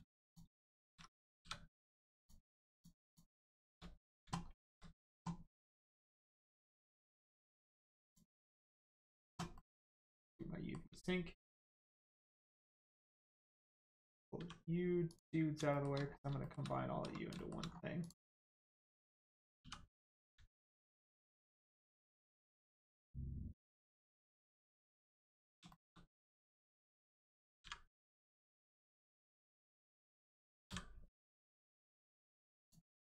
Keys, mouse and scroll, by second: 0.2 shift+click, 0.7 shift+middle click, 0.9 scroll up 1, 1.8 click, 2.1 shift+click, 2.7 shift+click, 8.0 click, 9.5 middle click, 9.9 shift+middle click, 10.3 middle click, 11.5 shift+click, 11.9 shift+click, 13.0 scroll down 1, 14.3 g, 15.1 click, 15.7 shift+middle click, 16.0 scroll up 1, 16.4 shift+middle click, 16.7 scroll up 1, 17.3 shift+middle click, 17.7 scroll up 1, 18.0 click, 18.7 scroll up 1, 20.1 click, 20.7 shift+middle click, 21.3 scroll down 1, 21.9 right click, 24.8 click, 25.7 shift+middle click, 26.5 click, 26.6 click, 28.8 right click, 32.6 click.